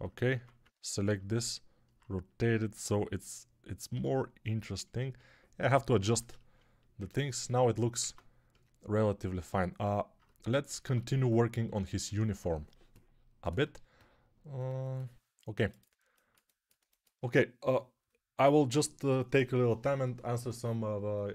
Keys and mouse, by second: 0.2 Tab, 3.8 g, 4.9-21.3 alt+middle drag, 7.9 ctrl+Tab, 10.8 ctrl+Tab.